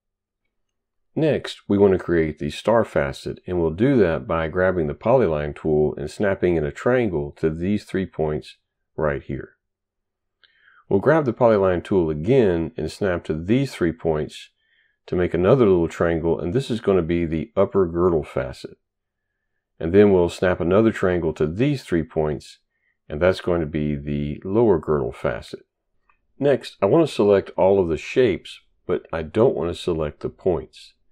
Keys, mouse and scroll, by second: 4.4 click, 6.1 click, 7.0 click, 8.1 click, 9.2 click, 10.0 right click, 11.9 click, 13.1 click, 14.0 click, 15.2 click, 16.2 click, 16.8 right click, 19.8 click, 21.6 click, 22.7 click, 23.5 click, 24.5 click, 24.8 right click, 29.4 right click.